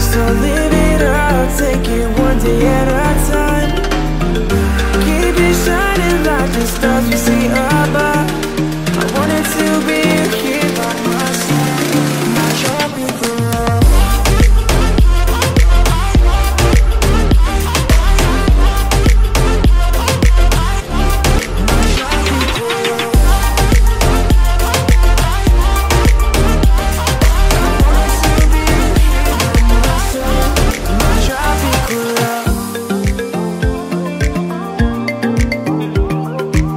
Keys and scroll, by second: 0.2 ctrl+a, 7.8 Return, 17.6 Return, 18.6 space, 27.1 Return, 28.4 ctrl+t.